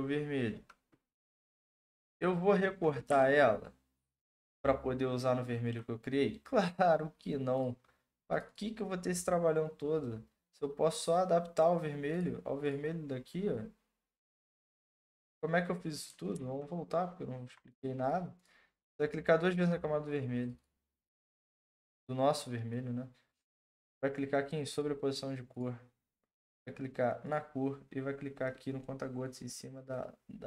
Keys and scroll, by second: 1.8 Return, 16.3 ctrl+z.